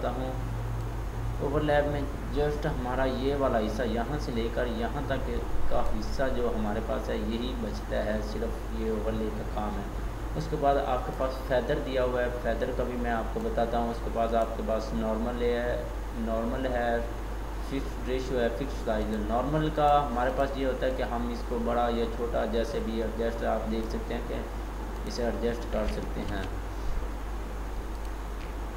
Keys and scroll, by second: 26.4 ctrl+d.